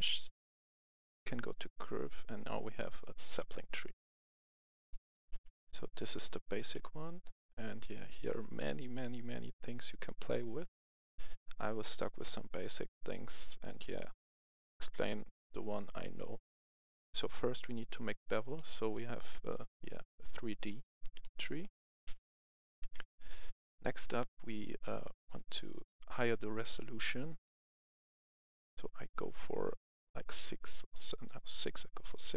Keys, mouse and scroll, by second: 2.8 click, 4.1-4.5 scroll down 1, 4.7 shift+middle click, 5.4-5.9 scroll up 1, 6.0 shift+middle click, 7.7-18.2 drag, 18.4-20.8 middle drag, 20.8 scroll up 1, 21.1 middle click, 21.9 KP_3, 22.7 KP_1, 25.2-32.2 drag.